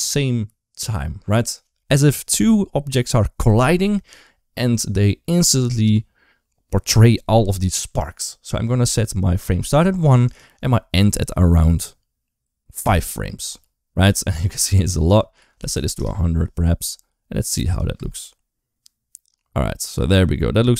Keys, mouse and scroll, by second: 10.1-12.7 drag, 14.5-15.8 drag, 15.6 0, 17.5 click, 17.8 space.